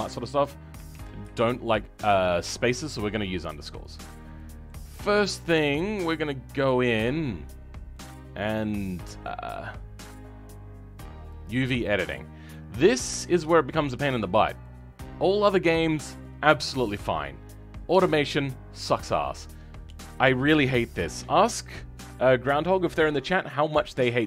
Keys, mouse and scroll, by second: 4.0 scroll down 3, 4.3 middle click, 4.8-7.6 scroll up 2, 7.6-7.9 scroll down 2, 7.9-11.3 middle drag, 11.3 click, 12.0 scroll up 2, 13.2-14.6 shift+middle drag, 14.6-18.1 drag, 18.1-18.4 scroll down 2, 18.4-24.2 middle drag.